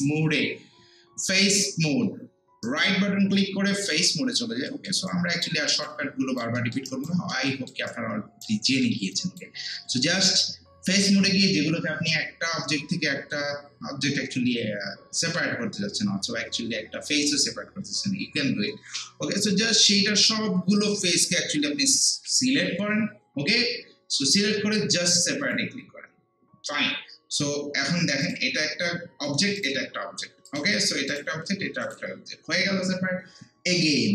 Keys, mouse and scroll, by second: 2.6-4.3 right drag, 4.3 scroll up 1, 4.7 alt+middle click, 5.1-6.6 alt+right drag, 6.6 alt+middle click, 6.9 alt+right click, 7.3 alt+middle click, 7.9 alt+right click, 8.7 alt+middle click, 9.1 click, 19.8 scroll up 1, 24.5 scroll down 1, 25.4 click, 28.2 click.